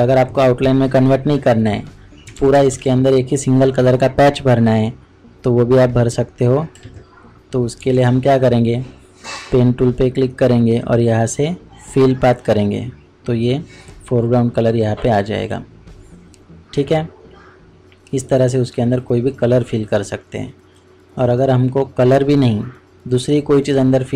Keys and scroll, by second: 2.2 ctrl+space, 2.3 ctrl+KP_Subtract.